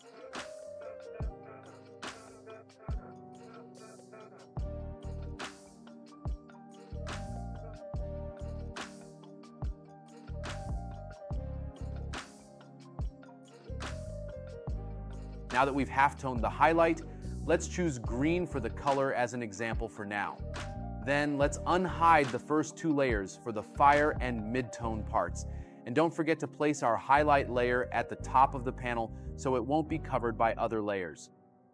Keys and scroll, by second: 3.7 space, 4.8 space, 13.1 space, 24.0 space.